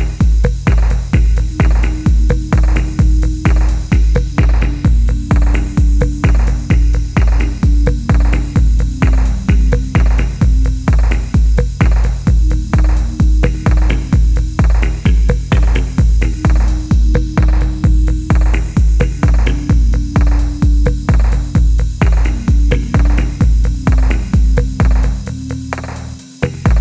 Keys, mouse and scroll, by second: 0.5 typing, 4.5-4.9 scroll down 1, 4.9-5.5 scroll up 1, 5.2-6.0 typing, 9.0-9.7 scroll up 1, 9.7 scroll down 1, 11.6 F1, 12.9 middle click, 13.1-13.8 scroll up 1, 13.8 typing, 16.0-16.3 scroll up 1, 16.3-16.7 scroll down 1, 18.2-20.3 typing, 18.5 middle click, 24.5 middle click, 25.5-26.8 scroll up 1.